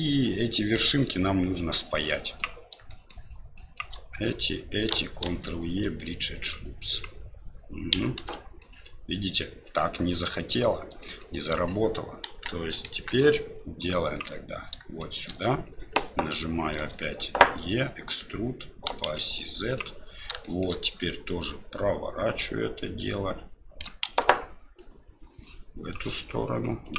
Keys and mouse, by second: 2.0 click, 2.9 shift+middle click, 3.5 shift+click, 5.2 ctrl+e, 8.2 ctrl+z, 8.6 middle click, 10.1 middle click, 11.2 shift+middle click, 12.2 KP_1, 12.8 KP_3, 13.9 click, 15.0 shift+middle click, 16.8 e, 20.5 shift+middle click, 22.4-24.0 drag, 24.0 ctrl+z, 24.7-25.9 drag, 26.8-26.9 drag.